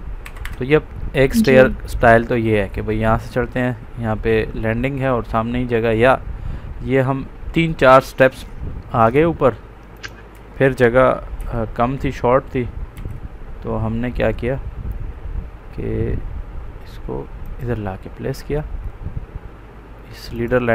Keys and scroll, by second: 0.2 Escape, 0.8 Up, 11.3 ctrl+x, 12.9 ctrl+v, 19.6 Up.